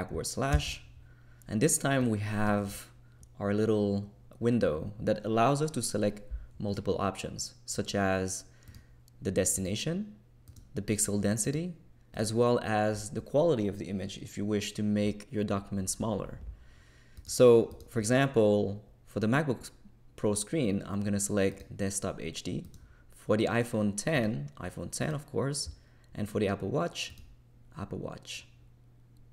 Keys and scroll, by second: 0.5 super+\.